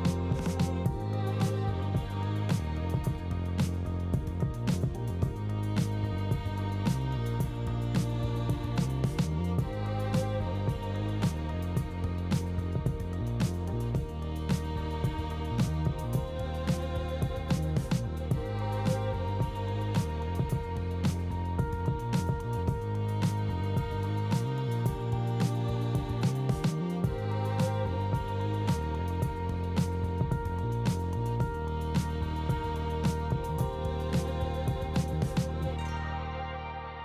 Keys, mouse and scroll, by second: 0.6 click, 1.0 ctrl+b, 2.1 Tab, 2.5-3.2 drag, 3.5 KP_1, 5.3-6.1 drag, 6.1 b, 6.3 g, 6.9-7.9 drag, 8.6 click, 9.1 click, 13.1-13.5 middle drag, 15.1 KP_3, 15.8 shift+middle drag, 16.3 g, 17.6 r, 20.1 KP_Decimal, 20.8 g, 24.6 r, 26.6 g, 28.6 middle drag, 29.0 ctrl+s, 29.5 middle drag, 30.0 shift+middle drag, 30.4 shift+a, 32.7 KP_1, 33.5-34.1 shift+middle drag, 34.7 alt+KP_0, 35.4 ctrl+b.